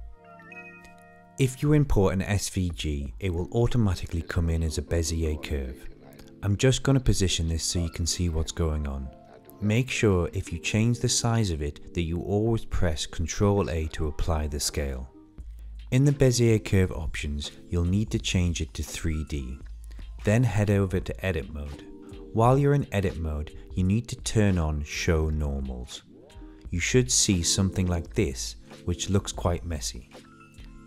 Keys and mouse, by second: 0.0 click, 1.4 click, 1.6 shift+click, 1.9 click, 3.2 click, 4.1 click, 4.6 Delete, 5.3-6.3 middle drag, 8.1 r, 9.1-9.6 middle drag, 9.9 shift+middle click, 10.1 middle click, 12.7 ctrl+a, 14.2 click, 14.7 click, 15.1-16.6 middle drag, 19.5 click, 21.0 Tab, 21.5-22.6 middle drag, 23.4-24.6 drag, 24.9-27.3 middle drag, 28.7-30.2 drag.